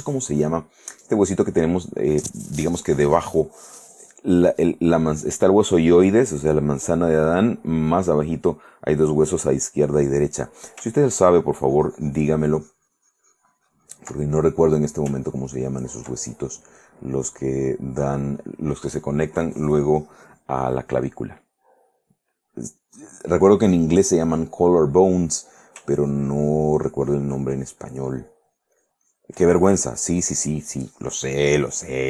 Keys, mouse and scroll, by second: 1.1 click, 3.7 click, 10.4 middle click, 11.1-14.3 ctrl+drag, 14.5 ctrl+middle click, 15.4-16.8 ctrl+drag, 16.8-18.4 ctrl+middle drag, 21.4-22.5 middle drag, 26.0-29.5 ctrl+drag, 30.1-32.0 drag.